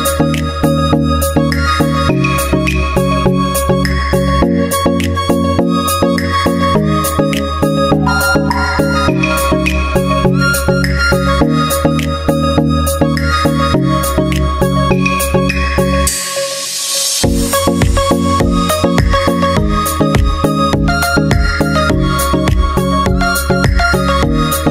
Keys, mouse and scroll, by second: 2.8 middle click, 3.5-6.6 drag, 6.8-8.6 drag, 9.3-10.4 drag, 10.8-13.3 drag, 13.9-15.2 middle drag, 15.2-17.2 drag, 17.2 middle click, 18.1-19.1 drag, 18.8 g, 19.5-23.7 drag, 24.2-24.7 middle drag.